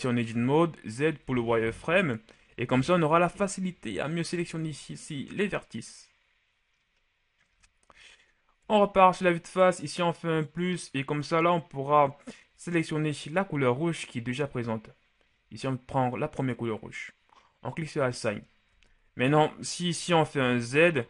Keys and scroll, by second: 9.0 KP_1, 20.6 shift+z.